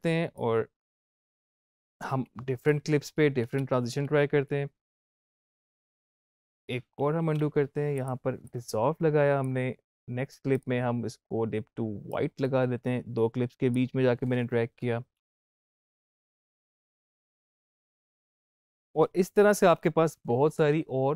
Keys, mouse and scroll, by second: 0.2-2.0 drag, 2.0 -, 3.3 Down, 5.8 click, 7.1 ctrl+z, 7.8-15.1 drag, 15.1 -, 16.0 space, 16.8 click, 17.0 space, 18.5-19.6 typing, 18.6 click.